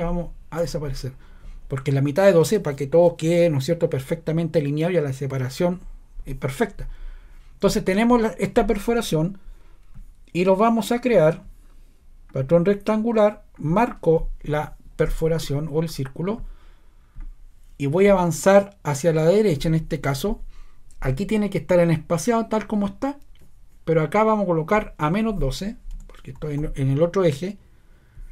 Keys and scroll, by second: 0.6 BackSpace, 25.9-26.5 typing.